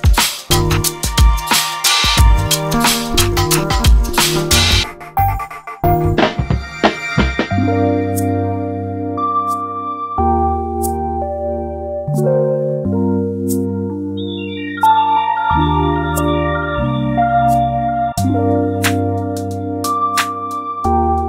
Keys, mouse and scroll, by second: 1.2 alt+shift+Left, 1.5 alt+shift+Left, 2.3 ctrl+i, 2.8 g, 6.4-6.8 scroll down 9, 6.8 scroll up 2, 7.1 shift+middle click, 7.8 middle click, 8.2-8.7 scroll down 1, 8.7-10.8 shift+middle drag, 10.8-11.7 scroll up 3, 11.7 ctrl+r, 14.5 2, 15.2 alt+shift+click, 16.3 alt+shift+click, 17.1 alt+s, 19.0-21.2 middle drag.